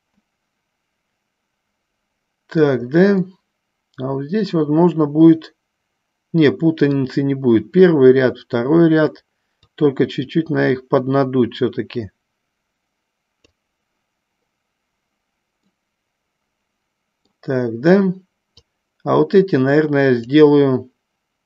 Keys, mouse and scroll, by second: 0.7-2.9 middle drag, 3.7-7.4 middle drag, 9.8-13.9 drag, 16.3-17.6 middle drag, 18.6-20.5 drag.